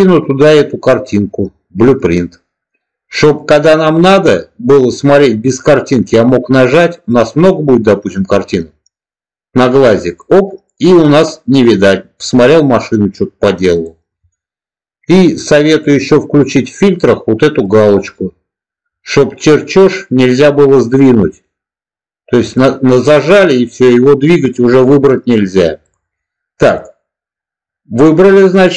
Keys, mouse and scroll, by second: 0.9-1.9 drag, 10.0 click, 13.7 click, 15.7-18.1 drag, 22.3 click, 25.7 click.